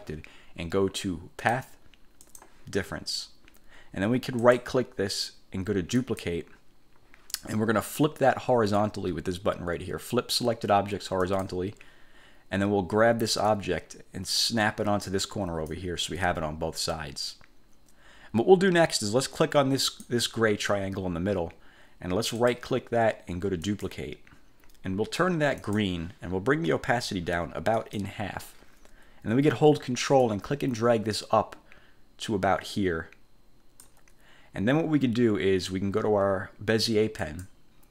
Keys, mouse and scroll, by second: 1.6 click, 2.4 click, 4.6 click, 6.1 click, 11.4 click, 13.6-16.0 drag, 20.0 click, 22.5 click, 23.8 click, 25.7 click, 27.9 click, 30.3-34.1 ctrl+drag, 37.3 click.